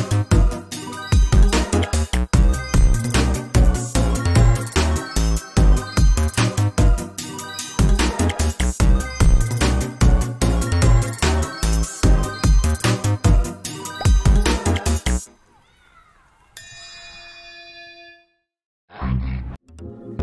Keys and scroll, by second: 0.6 ctrl+t, 2.4 ctrl+s, 4.1 ctrl+c, 6.2 ctrl+a, 6.4 ctrl+c, 6.7 ctrl+v, 7.7 ctrl+space, 8.0 ctrl+t, 9.4 ctrl+space, 12.4 ctrl+s, 14.1 ctrl+shift+s, 16.0 ctrl+g.